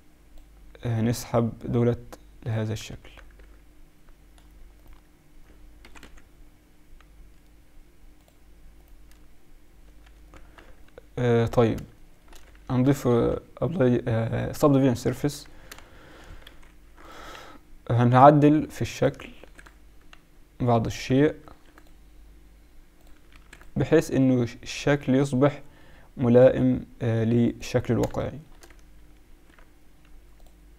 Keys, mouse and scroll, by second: 1.1-2.9 drag, 2.9 Tab, 3.3 z, 4.8-6.6 right drag, 5.8 g, 8.7-10.5 right drag, 9.8 Tab, 10.1 Tab, 10.5 z, 11.5 z, 12.8 ctrl+2, 15.2 Tab, 16.5 ctrl+r, 19.3 ctrl+r, 21.4 ctrl+r, 23.3 ctrl+r, 28.3-30.7 drag, 29.3 ctrl+r.